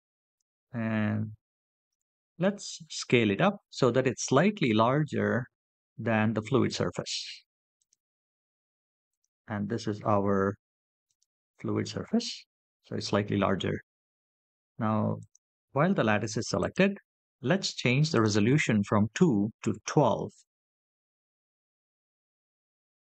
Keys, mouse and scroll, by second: 2.4 KP_7, 3.7 s, 6.6 click, 9.7 click, 12.6 click, 15.3-16.8 drag, 18.4-19.5 drag, 21.0-22.2 drag.